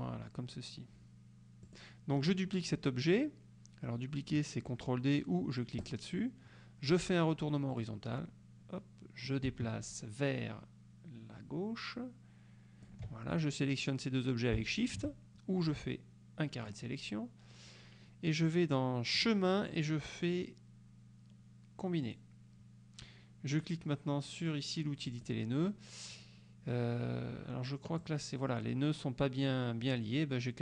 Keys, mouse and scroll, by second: 1.7 click, 5.9 click, 7.8 click, 9.3-13.1 ctrl+drag, 14.8 shift+click, 15.7-17.0 drag, 19.3 click, 22.2 click, 25.2 click, 28.1-28.9 drag.